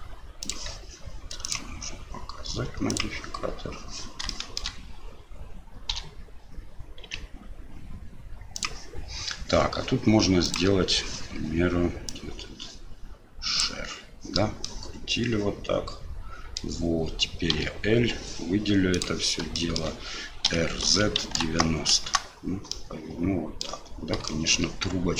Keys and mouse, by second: 2.9 click, 4.4 shift+middle click, 10.4 click, 12.1-13.6 drag, 14.6-16.6 middle drag, 17.5 l, 19.0 click, 19.6 shift+middle click, 20.5 r, 22.7-24.2 middle drag, 24.4 shift+middle click.